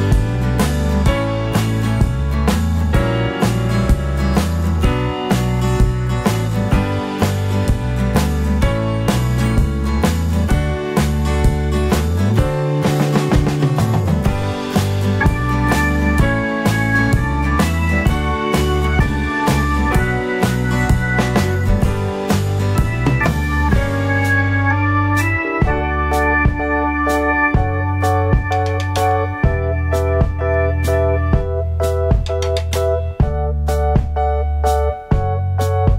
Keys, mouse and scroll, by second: 5.9 KP_7, 13.3 r, 19.5 g, 31.2 g, 33.8 Tab, 35.6 scroll up 1.